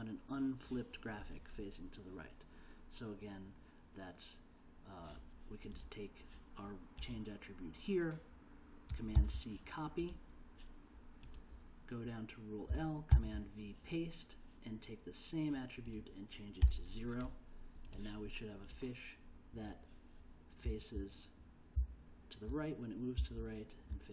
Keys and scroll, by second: 9.1 super+c, 13.1 super+v, 16.6 0, 20.7 l, 21.8 k, 23.2 j.